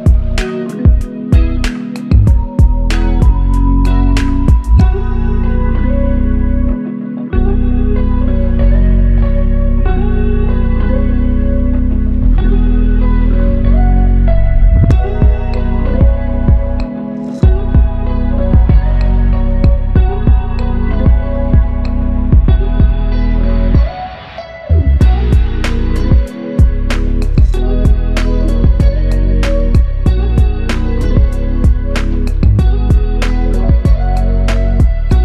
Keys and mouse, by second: 7.7 alt+click, 8.4 ctrl+click, 11.5 alt+click, 16.6 double click, 34.1 alt+click.